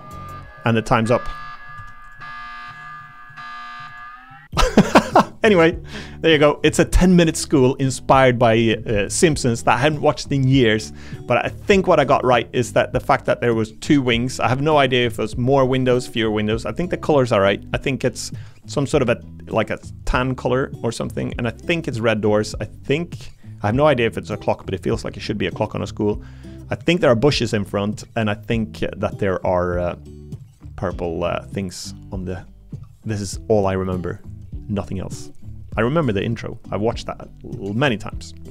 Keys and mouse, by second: 1.7 Tab, 2.7 middle click, 3.8 click, 11.5 middle click.